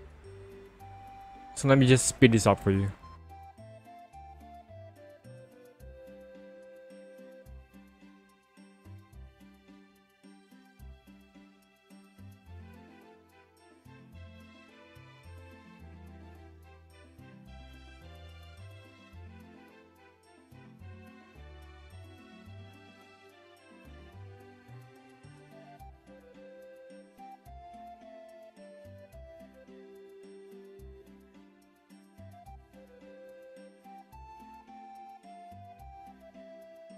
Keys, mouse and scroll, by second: 0.5-3.3 ctrl+alt+scroll up 1, 4.2 click, 4.9 click, 5.1 ctrl+click, 5.4 ctrl+alt+z, 5.9 ctrl+click, 6.2 click, 6.2 ctrl+alt+z, 6.4 ctrl+click, 6.8 ctrl+click, 7.3 ctrl+click, 8.0 click, 8.2 ctrl+alt+z, 8.7 click, 8.9 click, 9.1 click, 9.3 click, 9.8 alt+click, 10.2 ctrl+click, 10.5 right click, 11.4 right click, 11.5 click, 11.7 scroll down 1, 12.0 ctrl+-, 12.6 click, 13.0 click, 13.6 click, 13.8 click, 14.1 click, 14.4 alt+click, 14.7 ctrl+alt+z, 15.0 alt+click, 15.5 click, 15.8 alt+click, 16.4 alt+click, 16.9 alt+click, 17.0 click, 17.3 click, 17.5 alt+click, 18.0 click, 18.2 click, 18.6 click, 18.8 click, 19.2 ctrl+alt+z, 19.5 click, 19.8 click, 20.2 click, 20.4 click, 20.6 alt+click, 20.9 alt+click, 21.1 scroll down 1, 21.5 click, 21.7 click, 22.0 alt+click, 22.1 click, 22.5 alt+click, 23.0 alt+click, 23.5 click, 23.8 alt+click, 24.1 click, 24.3 click, 24.7 alt+click, 25.6 click, 25.8 right click, 25.9 click, 26.8 right click, 26.9 click, 27.0 scroll down 1, 27.4 ctrl+scroll up 1, 27.6 click, 27.9 p, 28.3 click, 28.6 alt+click, 29.2 alt+click, 29.7 click, 30.0 alt+click, 30.1 click, 30.5 ctrl+alt+z, 30.6 click, 31.1 ctrl+alt+z, 31.2 click, 31.6 ctrl+click, 31.9 ctrl+click, 32.2 ctrl+click, 32.6 click, 33.2 ctrl+alt+z, 33.5 click, 33.9 alt+click, 34.3 alt+click, 34.4 click, 34.9 click, 35.1 click, 35.4 click, 36.0 ctrl+alt+z, 36.6 click, 36.8 click.